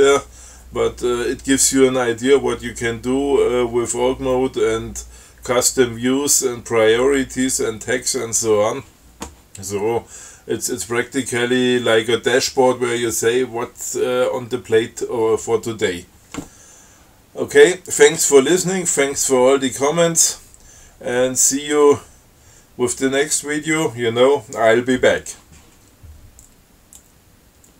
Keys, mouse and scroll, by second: 27.3 click.